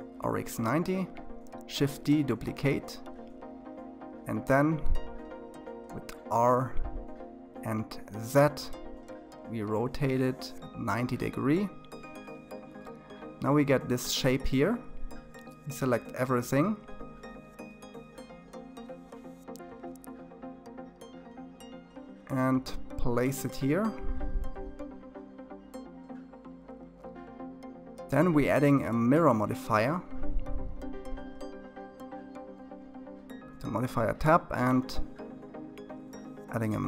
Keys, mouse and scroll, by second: 0.6 r, 4.7-5.6 scroll down 3, 5.6-7.5 scroll up 2, 7.5 ctrl+z, 8.4-11.1 middle drag, 11.1-11.5 scroll down 2, 11.5-13.7 middle drag, 13.7 a, 14.6 KP_1, 16.0-17.7 scroll down 7, 17.7 g, 36.4 click.